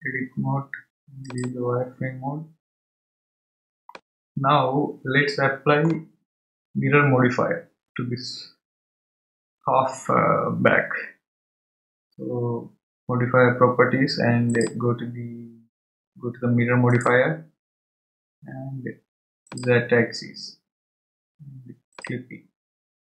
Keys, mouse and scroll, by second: 0.8 Tab, 1.3 click, 3.3 scroll down 2, 3.9-6.9 middle drag, 14.5 click, 17.0 click, 19.5 click, 22.0 click, 22.9-23.1 scroll down 1.